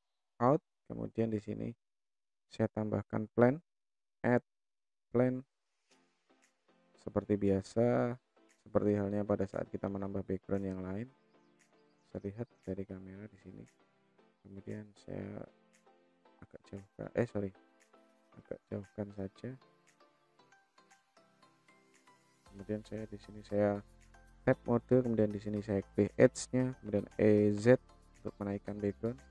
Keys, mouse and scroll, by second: 0.6 click, 1.2 scroll down 2, 1.7-2.2 middle drag, 4.1-5.1 drag, 6.1 s, 7.1 s, 10.4 middle drag, 11.5 KP_0, 12.2 KP_0, 13.5 click, 14.4 click, 15.8-16.8 drag, 17.3 ctrl+z, 18.7-19.1 middle drag, 19.9-21.2 drag, 21.6-22.8 middle drag, 23.8 Tab, 24.2 click, 25.0 click, 26.4 e.